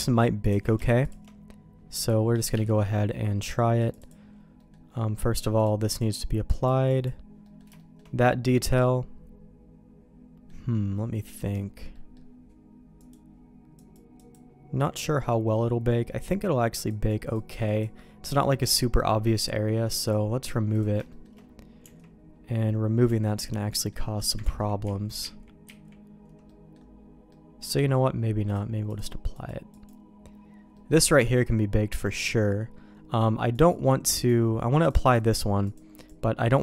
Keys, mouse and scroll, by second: 0.4 q, 2.5 Escape, 3.7 click, 4.0 click, 4.5 middle click, 5.5 click, 6.5 click, 6.8 click, 7.4 middle click, 7.7 shift+middle click, 8.8-10.4 middle drag, 11.9 middle click, 12.9 click, 13.7 click, 14.1 click, 16.8 click, 17.3 click, 17.6 click, 18.4 middle click, 19.9 click, 20.7 click, 21.0 shift+middle click, 21.7 Tab, 23.0 Tab, 23.7 middle click, 24.4 ctrl+z, 24.8 ctrl+z, 25.2 ctrl+z, 26.1 ctrl+z, 26.4 middle click, 27.2 middle click, 28.5 click, 29.3 click, 30.7 middle click, 31.7 middle click, 33.5 click, 34.1 click, 34.8 click, 35.6 click.